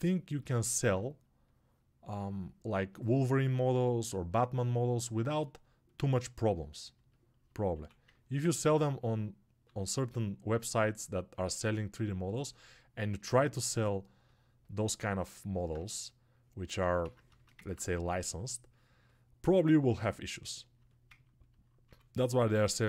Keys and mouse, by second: 5.2 alt+right click, 5.8 click, 5.8 alt+right click, 6.1 click, 6.8 alt+right click, 7.0 click, 8.0-17.4 ctrl+right drag, 17.4-22.8 ctrl+alt+drag.